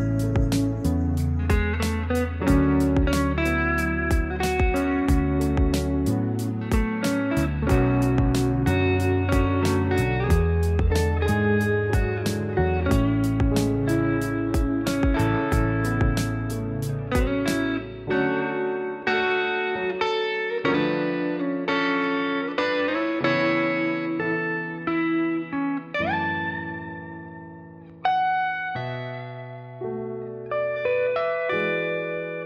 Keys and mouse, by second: 0.4 click, 0.9-1.2 middle drag, 1.6-2.2 middle drag, 2.6 click, 2.8 middle click, 3.2 middle click, 3.8 click, 4.5 s, 7.2-7.8 middle drag, 8.1-9.9 drag, 9.9-10.4 middle drag, 10.6 middle click, 11.5 click, 12.3 click, 13.1-13.4 middle drag, 13.6 click, 13.7-14.2 middle drag, 14.5-14.9 middle drag, 14.9 click, 15.2 click, 16.9 click, 17.3-17.7 middle drag, 17.9 middle drag, 18.2 shift+middle drag, 18.6 shift+a, 19.4 middle click, 19.8 click, 20.3 s, 21.3 s, 23.0-23.3 middle drag, 23.7 shift+middle click, 24.4 s, 26.1 click, 27.2 click, 27.7 s, 29.0-29.4 middle drag, 29.7 s, 31.6 click, 32.0 shift+middle click.